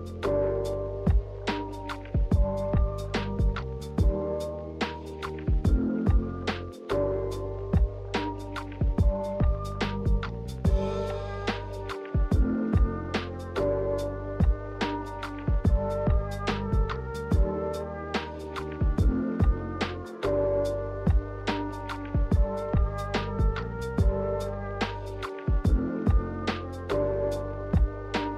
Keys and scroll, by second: 3.7 z, 4.7 ctrl+z, 5.7-6.4 typing, 8.0-8.9 typing, 10.1 z, 12.0 Delete, 12.5 Delete, 13.5 v, 17.4 x, 18.1 z, 20.6 v, 20.9 z, 21.7 v, 22.8 Delete, 23.1-23.9 typing.